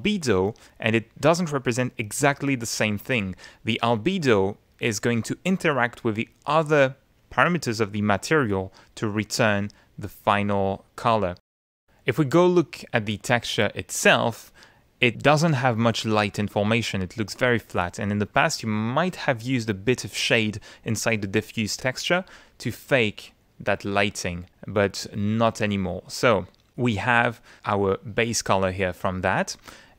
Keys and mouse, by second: 22.5 click, 23.4 click, 23.6 middle click, 24.5 middle click, 25.4-26.4 middle drag, 27.2 middle click, 27.8 middle click, 28.7 click, 28.7 middle click, 28.9 click.